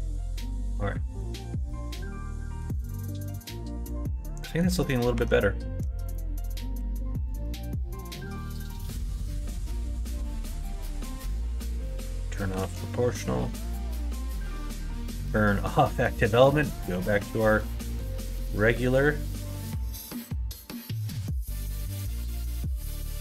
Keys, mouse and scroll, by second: 1.6 middle click, 2.9-4.6 middle drag, 5.1 Tab, 6.1 alt+click, 6.7 2, 7.3 alt+click, 8.3 click, 9.1 ctrl+click, 10.0 s, 11.9 o, 12.5 s, 14.3 ctrl+z, 15.1 ., 16.8 s, 19.5 g, 21.7 ctrl+z, 22.3 middle click, 22.9 click.